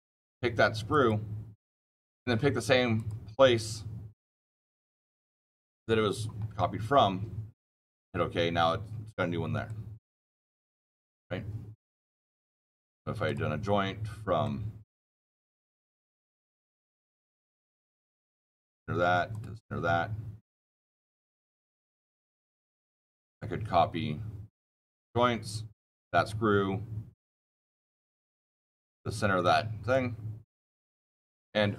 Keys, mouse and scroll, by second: 0.8 click, 6.9-7.8 scroll, 7.8 click, 9.6-12.1 shift+middle click, 10.0 shift+middle click, 10.1 shift+middle click, 11.1-12.2 shift+middle drag, 13.2 shift+middle click, 14.8-15.2 scroll, 16.4-17.9 scroll, 17.9 click, 17.9-18.8 scroll, 19.3 click, 20.8 click, 21.3 shift+middle click, 22.0 scroll down 6, 22.7 click, 23.1 click, 24.4 click, 25.7 scroll, 25.9 click, 27.3-27.8 scroll down 13, 29.3 click.